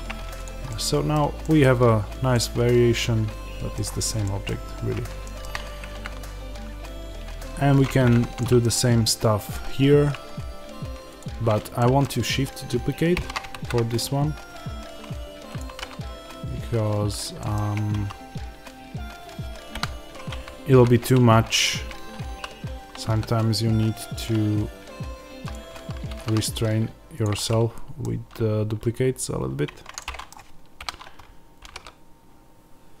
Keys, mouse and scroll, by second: 0.0 middle click, 0.0-0.3 scroll down 2, 0.3 click, 0.6-5.9 middle drag, 1.1 scroll down 2, 1.7-2.3 scroll up 2, 3.6-4.2 scroll down 2, 4.6-5.1 scroll up 2, 8.1-11.1 shift+middle drag, 11.1 click, 11.7-15.5 middle drag, 13.1 shift+d, 15.5 click, 15.6 g, 17.1 click, 17.4 middle click, 17.6 Tab, 19.6 KP_1, 20.7-25.4 middle drag, 20.7 z, 25.4 click, 25.6 s, 27.1 click, 27.3-33.0 middle drag, 29.6 Tab, 30.7 KP_1, 31.5 g.